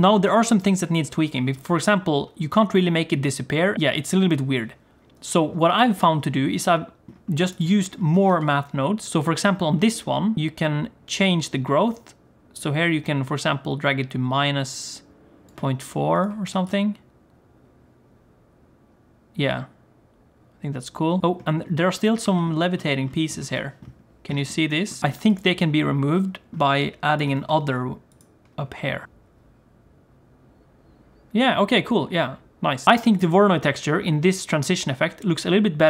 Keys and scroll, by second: 8.2 shift+d, 16.4 g, 27.3 shift+d, 29.0 g.